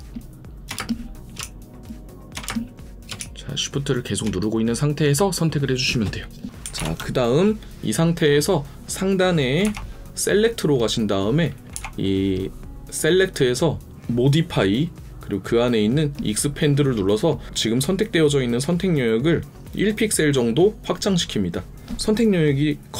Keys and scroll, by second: 2.4-3.2 typing, 6.6 space, 6.8 ctrl+0.